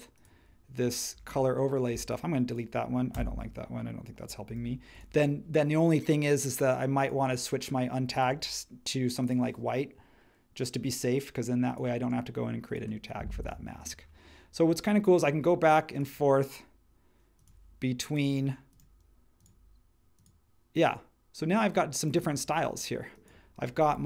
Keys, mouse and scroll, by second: 3.1 BackSpace, 4.4 super+1.